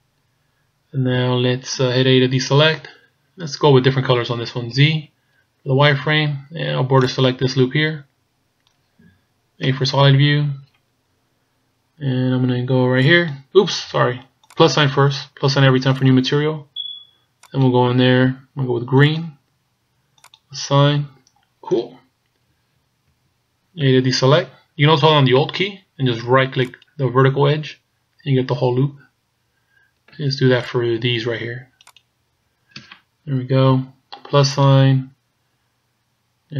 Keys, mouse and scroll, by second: 2.6 a, 4.7 z, 5.9 b, 9.7 z, 10.1-11.1 scroll up 2, 11.1-12.8 scroll down 2, 13.0 click, 16.0 click, 17.5 click, 20.7 click, 22.5 z, 23.2 z, 23.9 a, 26.7 alt+right click, 30.7 alt+shift+right click, 34.6 click.